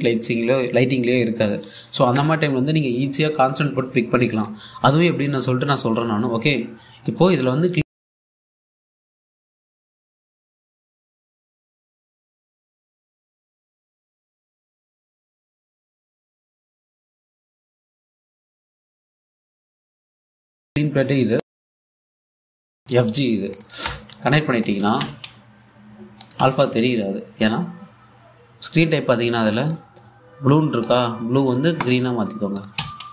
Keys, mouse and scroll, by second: 7.7-11.2 drag, 11.5 1, 12.3 click, 12.7 a, 13.9 click, 14.1 a, 17.1 click, 20.5-21.1 typing, 22.1-22.5 scroll up 1, 22.5 typing, 24.5 typing, 25.4 click, 25.6 1, 26.7 click, 26.9-31.3 typing, 32.7 typing.